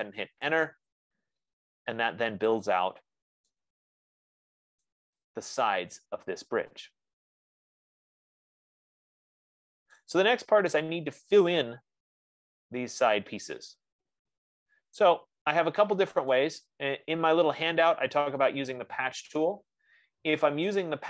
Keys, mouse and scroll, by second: 0.8 Return, 3.2 click, 5.2 right click, 5.8 click, 10.4 right click, 16.7 right click, 17.6-18.3 scroll, 18.3 scroll.